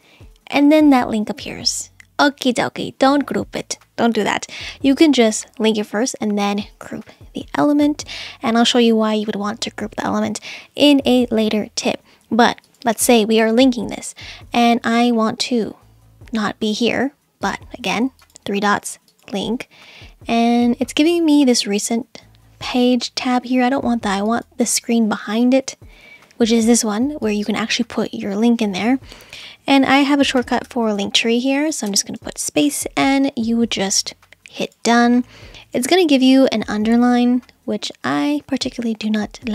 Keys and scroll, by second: 30.4 l, 30.7 t, 31.9 space.